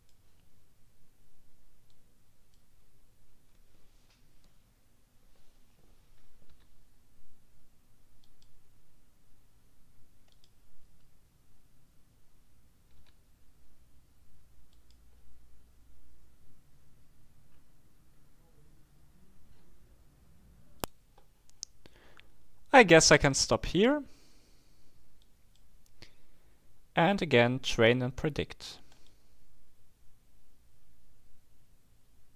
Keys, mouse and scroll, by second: 1.9-3.0 drag, 6.5 k, 8.2 click, 10.3 click, 12.9 k, 14.7 click, 17.5-18.1 scroll up 2, 21.2 right click, 25.3 click, 29.0 click.